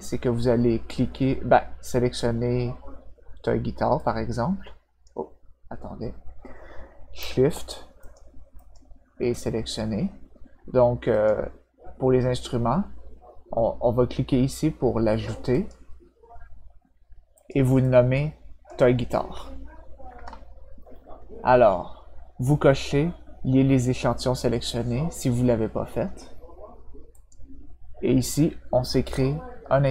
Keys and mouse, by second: 3.9-5.0 drag, 8.0 shift+click, 8.5 shift+click, 11.1 click, 15.5 click, 17.3 click, 17.8 click, 20.1 BackSpace, 27.1 click.